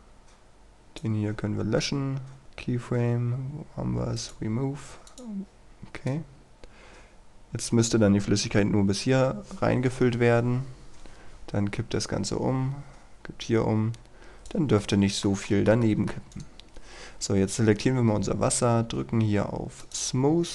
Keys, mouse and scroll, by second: 1.8-2.4 scroll down 1, 2.4-2.8 scroll up 1, 2.8-3.5 scroll down 1, 4.2-14.6 drag, 14.8 middle click, 15.5 shift+middle click, 16.4 right click, 16.8-17.5 scroll up 1, 19.8 click, 20.4 scroll down 1.